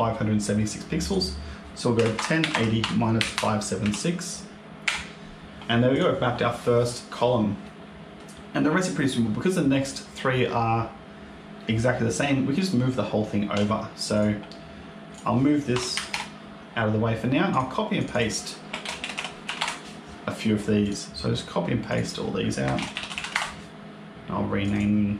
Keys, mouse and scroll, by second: 0.9 click, 5.8 click, 7.2-7.5 scroll down 1, 7.5 middle click, 13.4 Tab, 14.0 click, 15.0 click, 16.6-17.4 scroll down 3, 17.4 click, 17.9 click, 18.4 click, 20.7 click, 21.1 ctrl+c, 21.1 ctrl+v, 21.1 click, 21.8 click, 21.9 click, 24.5 click, 24.6 click.